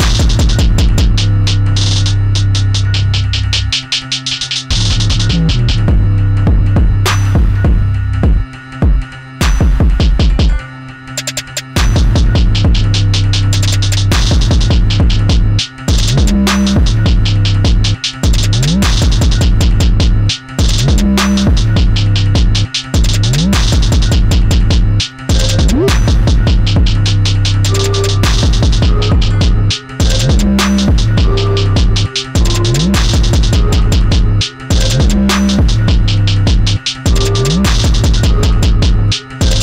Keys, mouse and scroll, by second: 1.9 click, 5.3 middle click, 6.3 click, 11.2 click, 13.0-13.4 scroll down 1, 14.1 click, 20.3 click, 24.5 click, 31.6 click, 36.7-38.5 scroll up 1, 38.5 click, 39.0 e.